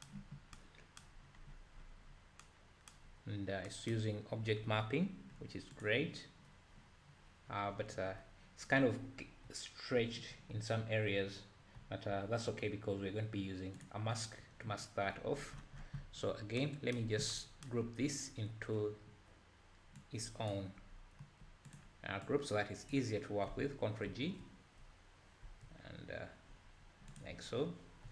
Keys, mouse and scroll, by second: 5.9 click, 7.5-8.1 scroll down 3, 8.1-9.1 scroll up 3, 9.4 `, 13.9 click, 24.3 ctrl+g, 27.8-28.1 scroll up 3.